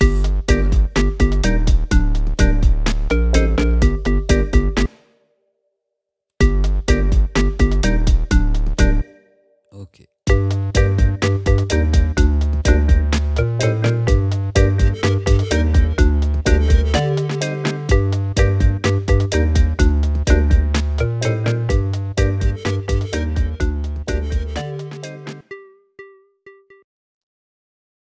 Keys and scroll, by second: 4.9 space, 6.4 space, 9.1 space.